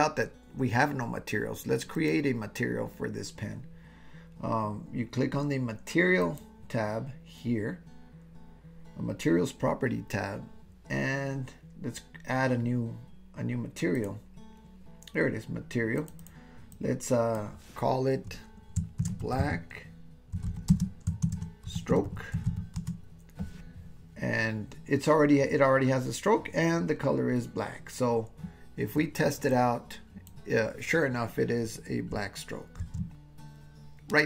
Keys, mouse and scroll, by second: 14.0 click, 16.1-23.8 drag, 29.5-31.2 drag, 33.0 super+z.